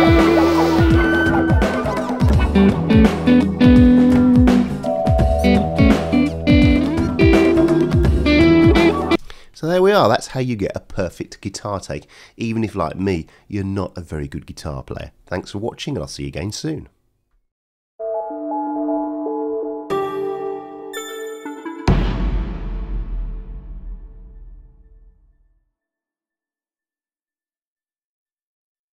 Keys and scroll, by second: 9.1 space.